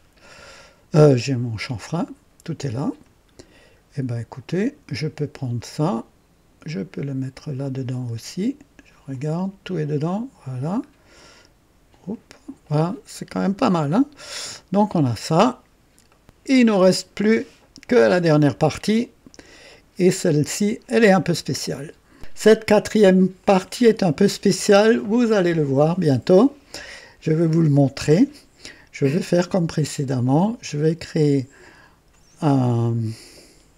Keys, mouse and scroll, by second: 3.4 scroll down 1, 6.6-8.2 drag, 9.1 click, 10.8 scroll up 1, 12.0 click, 13.5 scroll up 1, 14.3-15.0 right drag, 15.0-15.5 scroll down 1, 16.0-16.8 right drag, 19.7 click, 22.1 right click, 23.4 click, 24.8 scroll down 1, 30.6 click, 32.6 click.